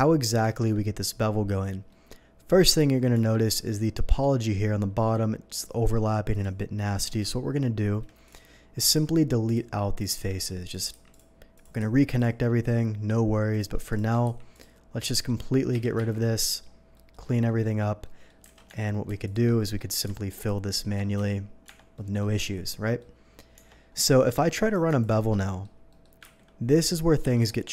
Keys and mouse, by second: 0.5-9.7 shift+drag, 3.1 Tab, 8.8 x, 10.0-27.7 drag, 14.2 x, 15.7 a, 16.0 3, 18.5 alt+a, 18.8 Tab, 21.1 f, 21.6 Tab, 21.7 f, 26.3 ctrl+b, 27.2 Escape.